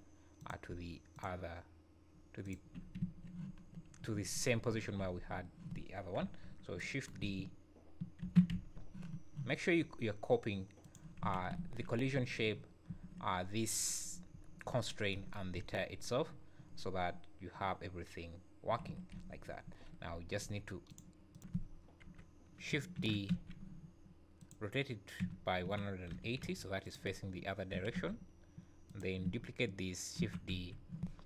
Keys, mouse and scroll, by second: 0.4 click, 1.2 shift+click, 2.5 click, 3.0 `, 5.0 z, 6.2 KP_1, 8.2 shift+d, 11.2 z, 11.6 `, 12.2 `, 14.3 `, 14.9 scroll down 3, 15.6 space, 19.2 Escape, 20.1-20.9 scroll up 3, 20.9 shift+click, 21.3 shift+click, 21.4 alt+a, 21.4 click, 21.4 scroll up 2, 21.4 `, 21.6 scroll down 4, 22.0 KP_7, 23.0 shift+d, 25.2 r, 27.7 g, 30.2 shift+d.